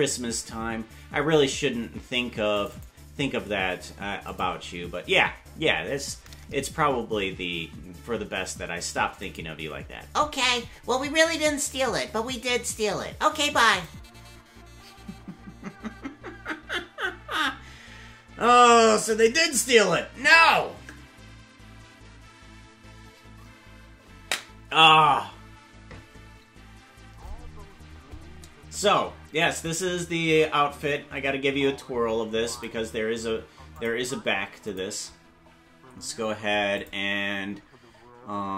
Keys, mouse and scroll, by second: 0.0-0.8 typing.